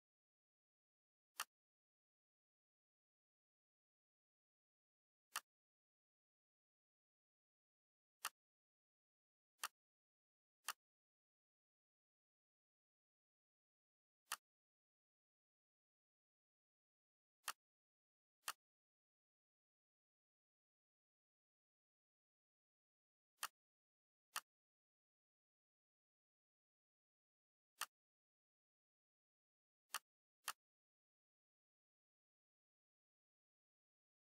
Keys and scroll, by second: 13.1 ctrl+c, 15.8 ctrl+v, 32.7 o, 34.0 m.